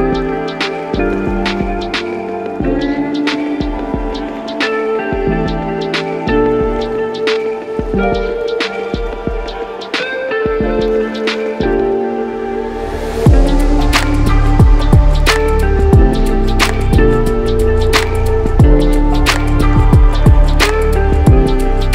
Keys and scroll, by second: 2.7-3.8 typing, 6.6-7.3 typing, 10.1 typing.